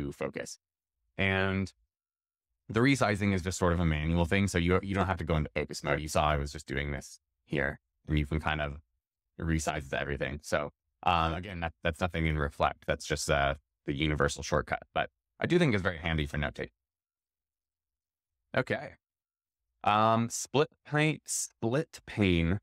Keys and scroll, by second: 6.0 super+=, 6.5 super+-, 6.9 super+=, 7.1 super+-, 9.0 super+-, 17.6 shift+super+x.